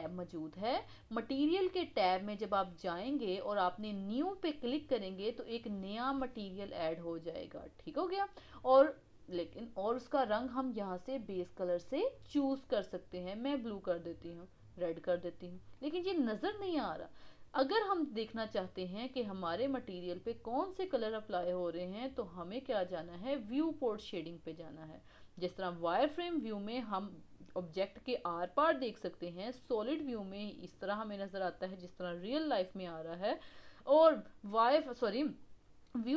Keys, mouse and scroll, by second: 4.4-7.6 drag, 12.0 click, 27.6-29.6 middle drag, 29.6 click, 30.2-33.4 middle drag, 35.4 click.